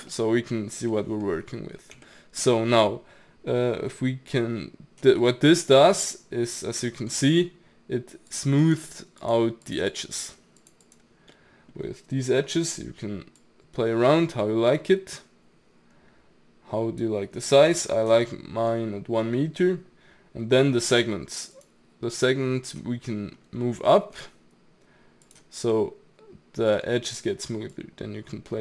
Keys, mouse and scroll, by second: 0.6 scroll up 1, 0.9-2.6 middle drag, 2.6-5.2 scroll down 1, 5.2-8.3 middle drag, 8.3 click, 8.6 click, 9.2 click, 9.7 click, 9.9 click, 10.2 click, 10.6 click, 10.8 click, 11.3-13.4 middle drag, 13.4-16.4 drag, 17.6 ctrl+z, 18.2-21.3 middle drag, 21.6-23.1 drag, 23.1 middle click, 23.4-23.9 scroll up 2, 23.9-25.3 shift+middle drag, 25.3-25.7 drag, 25.7-27.7 middle drag, 27.7-28.6 drag.